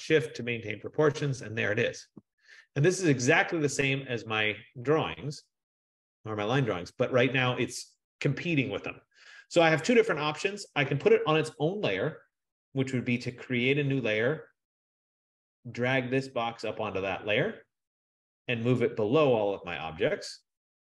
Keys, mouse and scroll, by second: 0.4 shift+click, 5.3 middle click, 5.3 middle click, 5.5-5.8 scroll, 6.1-6.8 scroll, 13.5 click, 16.9 click, 19.5 click.